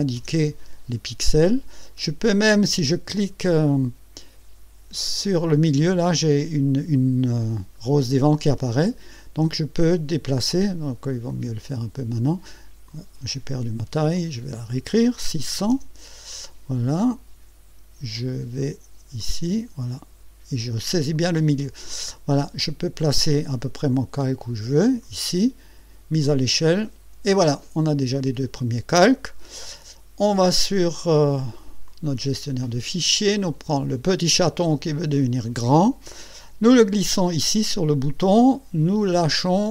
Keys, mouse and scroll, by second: 8.6-10.8 drag, 11.3 click, 12.9 click, 14.1 click, 15.2 KP_6, 15.5 KP_0, 19.2 click, 21.1-25.1 drag, 26.2 click, 31.0 click, 31.9 click, 34.7-39.7 drag.